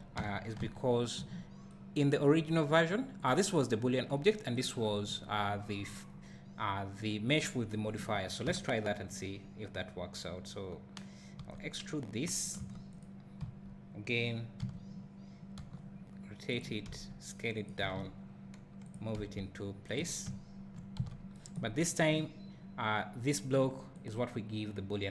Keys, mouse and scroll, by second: 0.2 Tab, 0.6 `, 3.3 click, 8.5 Tab, 11.4 e, 12.5 click, 12.6 Tab, 13.0 click, 13.4 KP_1, 14.7 z, 15.6 r, 16.6 click, 16.9 s, 17.6 click, 17.8 g, 18.9 click, 19.1 s, 20.0 click, 20.2 `, 21.1 z, 21.7 scroll up 1.